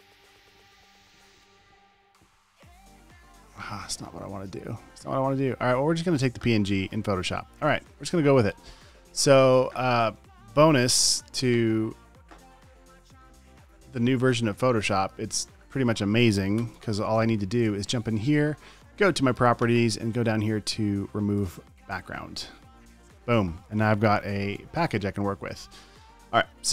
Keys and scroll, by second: 10.9 super+j, 16.9 alt+BackSpace, 17.0 v, 24.9 v, 25.7 space.